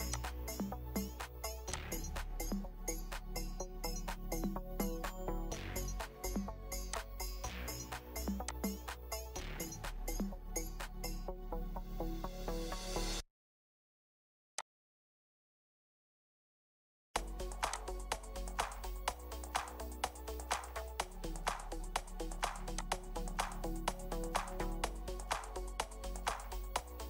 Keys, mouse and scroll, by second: 2.9 scroll up 1, 3.0 middle click, 4.3 scroll up 1, 4.4 middle click, 5.2-5.6 scroll down 1, 10.1 middle click, 11.3 scroll up 1, 11.3 scroll down 1, 11.5 scroll up 1, 11.6-11.9 scroll down 1, 16.0 middle click, 18.9 middle click, 24.1 middle click, 24.2 scroll up 1.